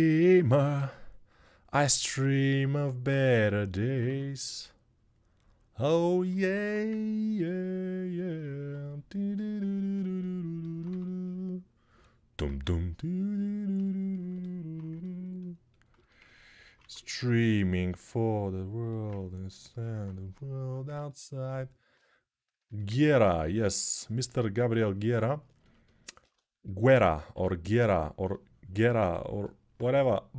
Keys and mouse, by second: 3.8 2, 6.4 1, 10.6-15.9 right drag, 15.9-19.5 ctrl+alt+drag, 16.6 1, 25.3-30.3 ctrl+alt+drag, 27.1 3.